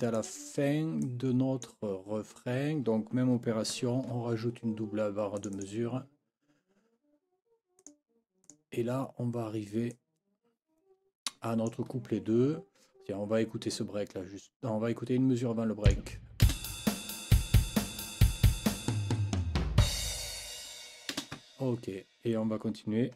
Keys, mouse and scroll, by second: 0.2 click, 1.0 click, 3.7 F9, 5.4 click, 7.8 click, 8.4 click, 9.9-10.8 scroll up 3, 16.4 space, 21.1 space.